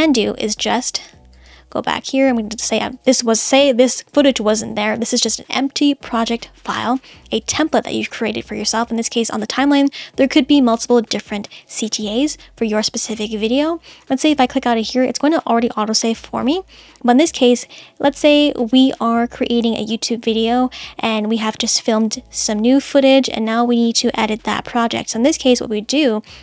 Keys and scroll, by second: 4.1 BackSpace.